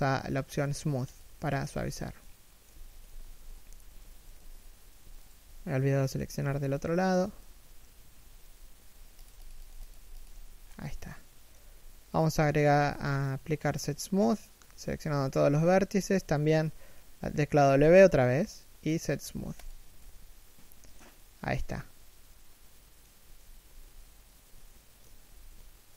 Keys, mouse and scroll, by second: 1.9 middle click, 2.5 z, 5.0 alt+right click, 5.5 middle click, 6.0 z, 6.1 middle click, 6.8 alt+shift+right click, 7.1 3, 7.5 1, 7.9 w, 9.5 scroll down 1, 9.8 middle click, 11.8 middle click, 12.2 a, 15.5 3, 16.0 1, 17.3 w, 20.0 middle click, 22.8 3, 23.3 1, 24.3 shift+middle click, 25.5 a.